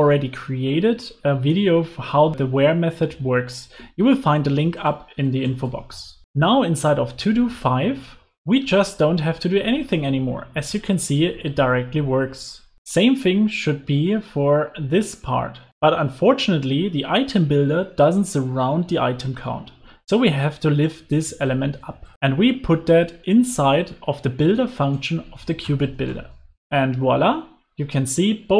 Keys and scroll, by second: 21.0 super+x, 25.9 super+v, 26.0 super+s.